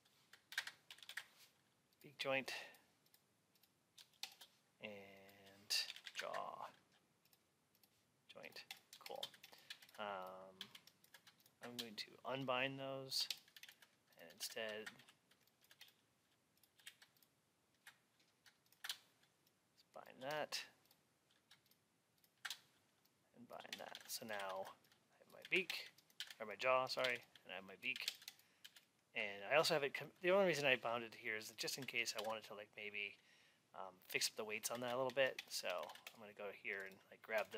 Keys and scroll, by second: 9.6 alt+x, 23.8 alt+x, 32.0 alt+x.